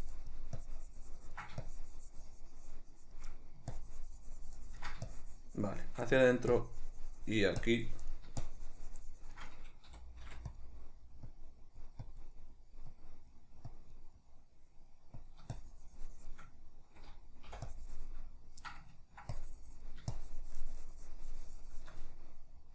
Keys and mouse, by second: 3.5 middle click, 3.9-6.2 ctrl+drag, 6.2 middle click, 6.7-10.7 drag, 10.0 g, 10.9 middle click, 11.4-12.5 drag, 12.5 middle click, 13.1-14.3 drag, 14.3-15.3 middle drag, 15.3-16.7 drag, 16.7-17.8 middle drag, 17.8-18.8 drag, 18.8 ctrl+middle click, 19.5-22.5 drag, 22.5-22.7 middle drag.